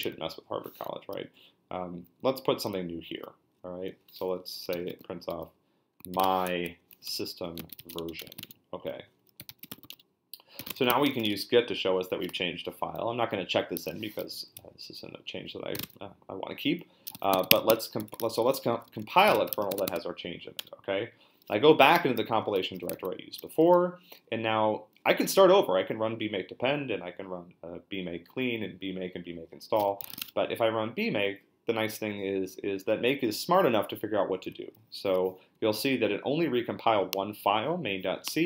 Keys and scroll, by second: 0.9 Down, 2.2 Down, 2.3 Down, 2.6 Down, 2.7 Left, 3.9 Right, 4.4-11.6 typing, 15.5-20.1 typing, 20.6 Return, 29.5-30.6 typing.